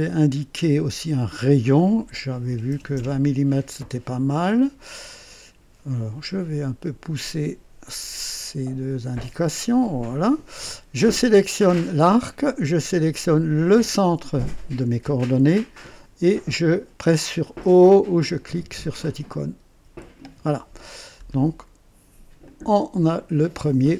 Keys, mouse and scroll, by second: 0.1 click, 1.4 click, 2.5 KP_2, 2.7 KP_0, 2.9 Return, 4.1 scroll down 2, 4.8 right click, 7.2-8.2 drag, 9.1-10.2 drag, 11.4 click, 13.6 click, 19.8 typing, 21.0-21.3 scroll down 2, 21.0 typing, 22.4 click.